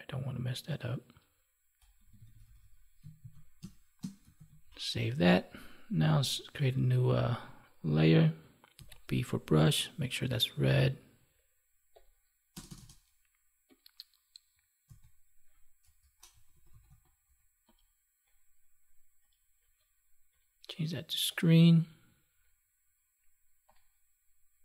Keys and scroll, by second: 3.1 ctrl+s, 3.5 space, 4.3 ctrl+s.